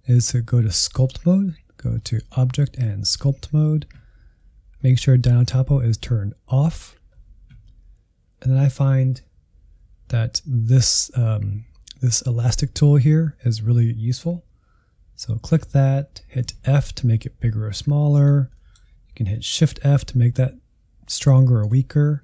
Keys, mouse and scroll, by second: 2.1-5.2 drag, 8.2-10.7 scroll down 4, 10.7-13.7 drag, 16.5 f, 18.5 middle click, 19.4 shift+f, 22.1-22.2 scroll up 1.